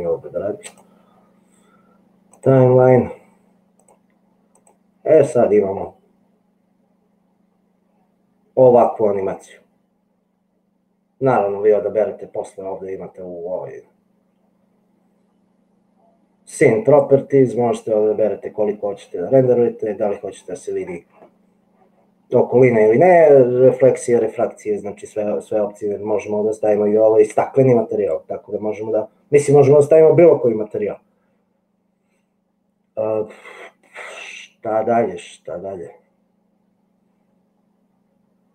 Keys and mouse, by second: 2.5 click, 3.9 click, 4.6 click, 8.8 click, 16.9 click.